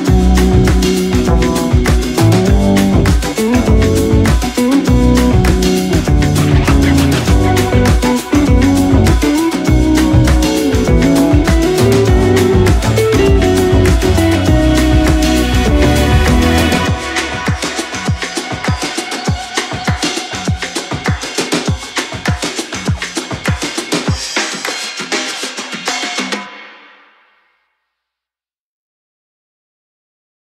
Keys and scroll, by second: 5.4 ctrl+g, 6.6 shift+c, 7.6 shift+c, 11.1 x, 15.6 ctrl+u, 19.1 ctrl+u, 26.3 ctrl+shift+a.